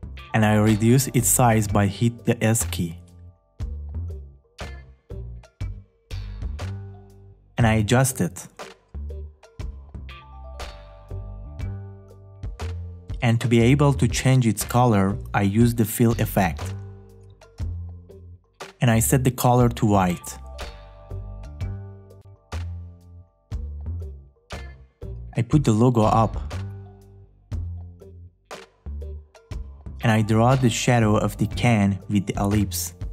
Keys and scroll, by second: 2.1 s.